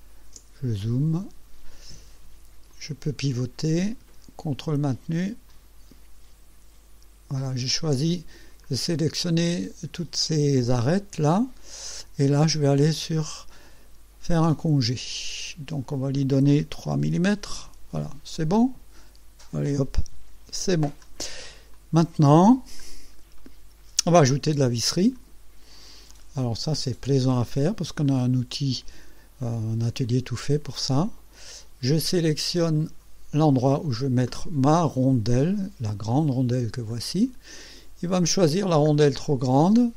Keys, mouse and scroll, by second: 0.5-0.9 ctrl+scroll up 2, 2.8-4.0 drag, 5.5 ctrl+click, 7.4 ctrl+click, 8.7-9.1 scroll down 2, 9.3-12.1 drag, 14.6 click, 17.1 KP_3, 17.6 KP_Enter, 18.4-19.8 drag, 20.4 ctrl+s, 21.0 ctrl+scroll down 3, 21.8 click, 22.9 scroll up 1, 23.4 right click, 24.5-25.4 drag, 26.2 click, 28.1 click, 30.7-31.5 drag, 32.8 click, 37.0 click, 38.6-38.9 scroll down 1.